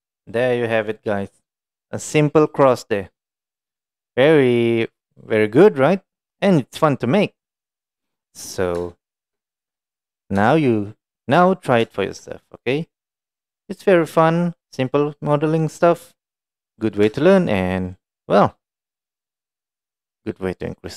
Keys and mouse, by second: 0.0-1.0 middle drag, 1.8-2.5 middle drag, 3.2-4.2 middle drag, 5.2-5.8 middle drag, 6.2-6.7 middle drag, 7.1-8.5 middle drag, 9.0-9.3 shift+middle drag, 9.8-10.3 middle drag, 10.5 shift+middle drag, 10.9 middle drag, 11.9 shift+middle drag, 12.4-13.0 middle drag, 13.4-14.9 middle drag, 15.6-17.0 middle drag, 17.3 shift+middle drag, 17.9-18.6 middle drag, 19.0-20.9 middle drag.